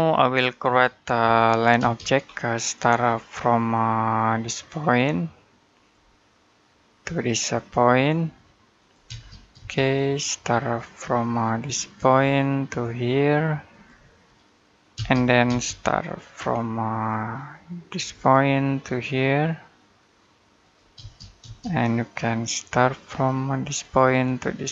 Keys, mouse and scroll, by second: 1.0 l, 1.6 space, 2.1-4.2 scroll up 1, 5.5 click, 8.6 click, 8.9 space, 11.9 click, 14.8 space, 17.8 click, 20.4 click, 20.8 space.